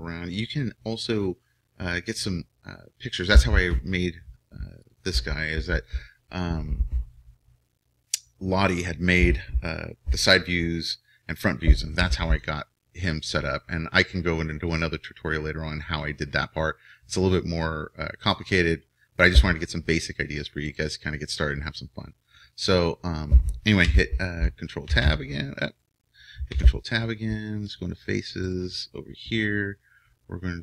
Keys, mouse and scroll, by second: 25.6 right click, 26.6 ctrl+Tab, 27.8 ctrl+Tab, 28.4-29.8 right drag, 30.0-30.6 right drag.